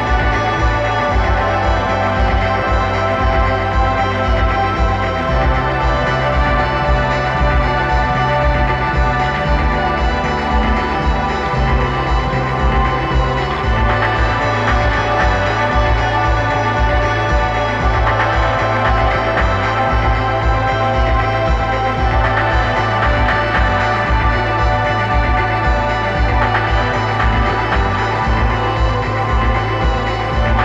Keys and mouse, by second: 3.9-5.5 drag, 22.5-24.3 drag, 25.5-27.4 drag, 26.9 right click.